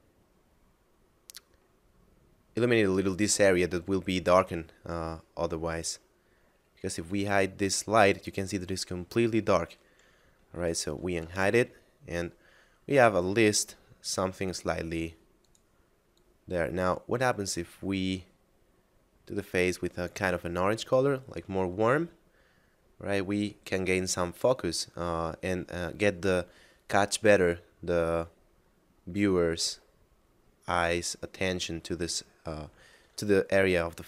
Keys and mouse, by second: 1.7 middle click, 6.9 h, 10.9 alt+h, 14.3 right click, 15.4 click, 27.8 middle click.